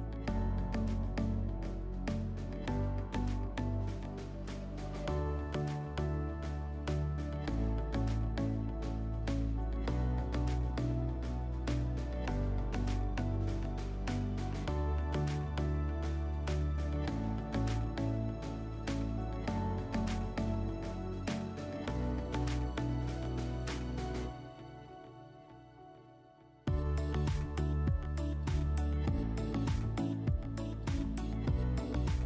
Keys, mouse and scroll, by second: 0.2 click, 7.6 click, 8.5 ctrl+click, 9.4 ctrl+click, 10.0 ctrl+click, 11.7 ctrl+click, 14.8 ctrl+click, 15.7 ctrl+click, 16.6 ctrl+click, 21.3 ctrl+click, 22.0 ctrl+click, 23.7 ctrl+click, 25.1 ctrl+click, 25.7 ctrl+click, 26.5 ctrl+click, 27.4 ctrl+click, 29.3 ctrl+click.